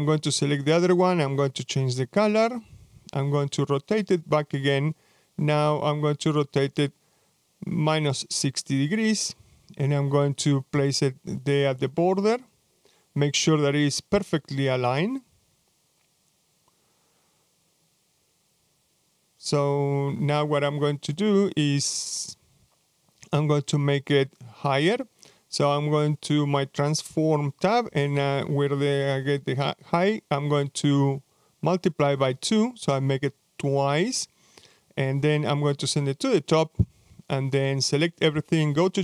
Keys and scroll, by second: 30.6-31.6 typing, 35.3-35.8 typing.